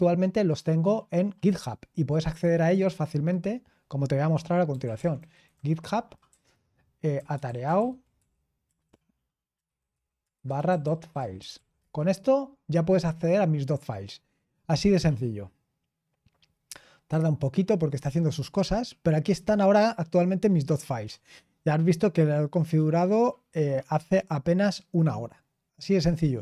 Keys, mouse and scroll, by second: 2.6 click, 4.4-12.3 typing, 6.3 Tab.